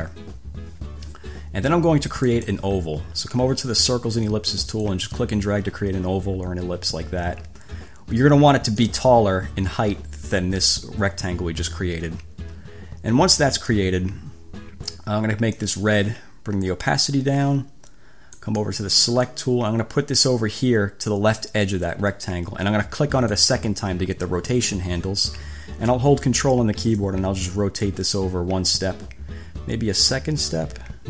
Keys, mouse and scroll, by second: 2.5 click, 5.0-9.3 drag, 14.0-15.3 drag, 15.9 click, 17.1 click, 18.7 click, 19.5-22.2 drag, 23.6 click, 27.3-31.0 ctrl+drag.